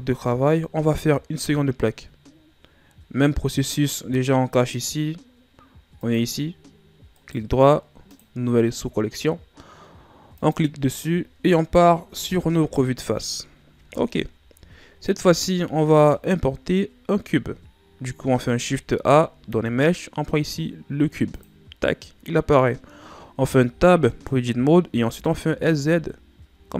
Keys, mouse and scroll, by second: 4.7 click, 5.9 click, 7.1-10.1 right drag, 10.3 click, 12.2 KP_1, 13.5 ctrl+scroll down 3, 15.0 shift+scroll down 3, 16.3-18.7 ctrl+scroll down 1, 18.7 shift+a, 23.6 Tab, 25.1 s.